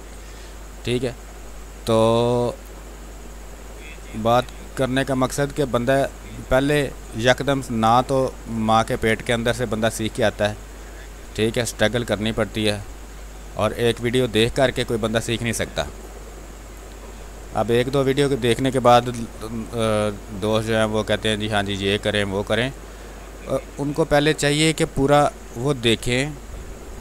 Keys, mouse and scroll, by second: 0.0 click, 0.3 space, 1.4-3.5 drag, 3.5 space, 3.6 click, 3.9 space, 4.6-6.2 drag, 6.2 click, 6.7 space, 6.9 click, 7.2 space, 9.2-12.9 drag, 12.9 space, 13.3 alt+click, 15.0 ctrl+click, 15.6 alt+click, 16.7 click, 18.8 b, 19.1 space, 19.5 ctrl+click, 20.5-22.0 drag, 22.0 space, 22.2 alt+click, 25.0 ctrl+d, 26.2 w, 26.2 click, 26.4 space, 26.9 click.